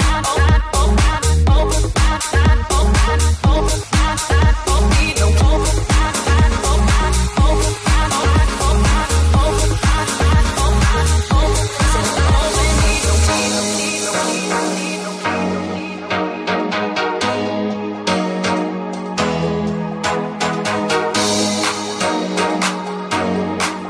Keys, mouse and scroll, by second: 0.4 ctrl+click, 0.5-3.2 ctrl+drag, 3.2-5.7 middle drag, 3.2 f, 5.7-7.3 ctrl+drag, 7.3 click, 7.8 ctrl+click, 8.2 ctrl+click, 12.3 click, 12.7 click, 13.7 click, 14.1 click, 14.4 click, 15.4 click, 16.5 ctrl+click, 18.6 ctrl+Tab, 18.6 click, 18.6 right click, 19.1 ctrl+s, 19.1-22.8 shift+drag, 19.8 shift+s, 20.4 ctrl+s, 20.4 right click, 20.6 right click, 23.7 click.